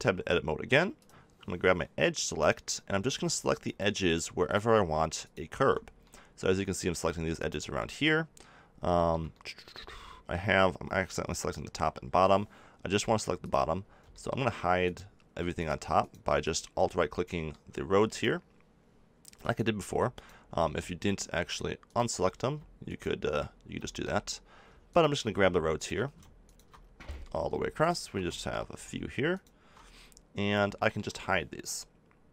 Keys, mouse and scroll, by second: 6.3-9.5 drag, 9.5 middle click, 11.6 a, 13.4-14.8 middle drag, 14.8 click, 14.8 right click, 15.9 right click, 16.9-22.8 middle drag, 22.8 click, 23.5 middle click, 23.8-25.7 middle drag, 25.7 right click, 26.7-30.3 middle drag.